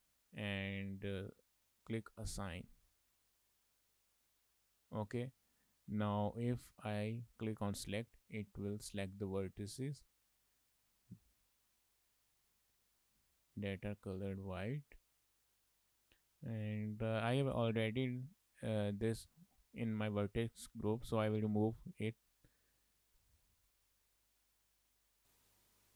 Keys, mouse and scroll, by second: 0.6 click, 2.7 click, 6.2 shift+middle click, 6.4 middle click, 7.8 click, 10.7 shift+middle click, 11.0 middle click, 12.5 shift+middle click, 12.7 middle click, 14.6 scroll down 1, 14.7 middle click, 22.2 click, 23.8 click, 24.6-25.3 click, 25.2 click, 25.5 click.